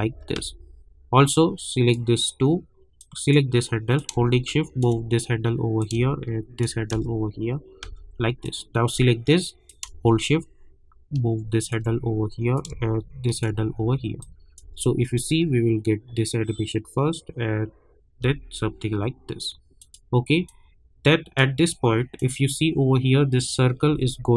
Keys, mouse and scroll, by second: 0.0 space, 1.3-5.8 drag, 5.8 click, 6.9 space, 8.4-14.2 drag, 14.2 click, 14.6 space, 18.2 space, 19.8-22.1 drag, 24.1-24.3 alt+scroll up 1.